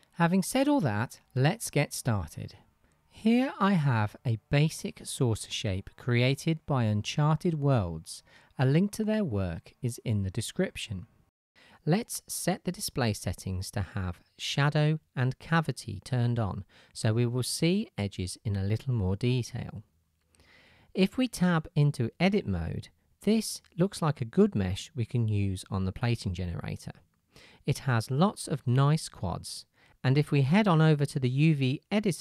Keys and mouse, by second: 0.2 click, 0.8-14.2 middle drag, 14.2-32.2 drag, 22.7 Tab.